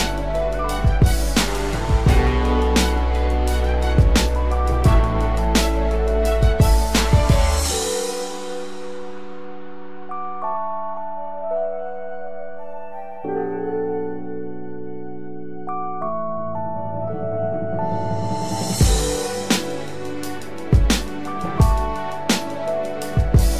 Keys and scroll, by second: 1.6 ctrl+z, 2.6 ctrl+alt+z, 15.9 ctrl+z.